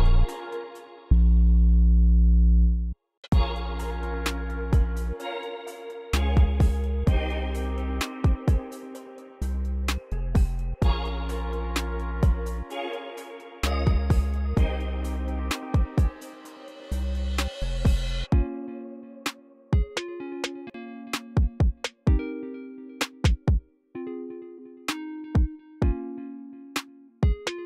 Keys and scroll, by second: 0.0-0.5 typing, 0.7 super+a, 1.1 alt+shift+Page_Up, 2.0 typing, 3.2 space, 10.8 c, 22.5 super+a, 23.1 u, 26.3 super+a, 26.5 alt+c, 27.5 alt+c.